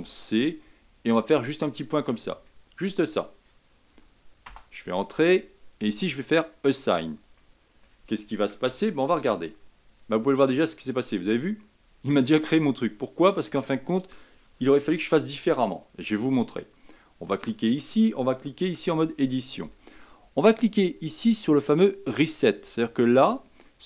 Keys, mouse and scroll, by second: 6.3 click, 7.0-7.4 scroll down 3, 7.4-8.7 middle drag, 8.7 Tab, 9.9 click, 10.7 scroll up 1, 12.7 scroll down 2, 17.2 click, 18.6 Tab, 22.1-23.6 drag, 23.6-23.8 middle drag.